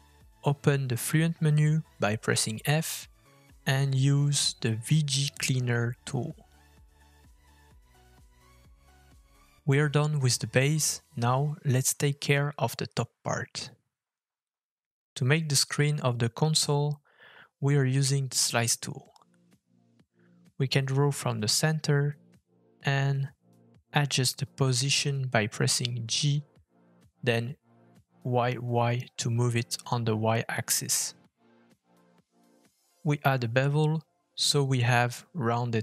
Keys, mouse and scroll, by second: 0.4-0.9 scroll up 2, 1.0 shift+middle click, 1.4-2.4 scroll up 1, 2.4 scroll up 1, 2.6-3.0 scroll down 2, 3.2 f, 10.1 middle click, 12.6-13.0 scroll down 2, 13.0 shift+middle click, 13.5 middle click, 14.3 shift+middle click, 14.8 middle click, 16.7 f, 19.8 shift+middle click, 26.4 middle click, 27.9 g, 33.9 middle click.